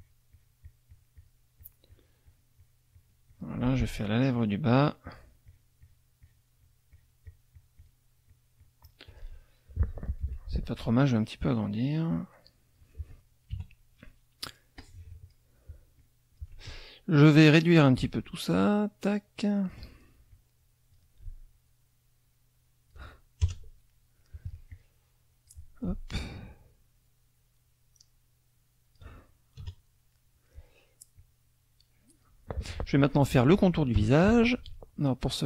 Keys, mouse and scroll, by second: 0.0 shift+click, 1.6 shift+click, 4.0 shift+click, 5.4 shift+click, 8.3 shift+click, 10.2 F1, 11.2-13.0 drag, 13.5 KP_Subtract, 14.1 click, 14.7 click, 16.0 click, 18.0-19.9 ctrl+drag, 20.3 ctrl+click, 21.5-23.1 ctrl+drag, 23.4 ctrl+KP_Add, 23.9 ctrl+click, 24.7 click, 26.3-29.1 ctrl+drag, 29.7 KP_Add, 30.1 click, 31.1-32.4 drag, 34.0 F6.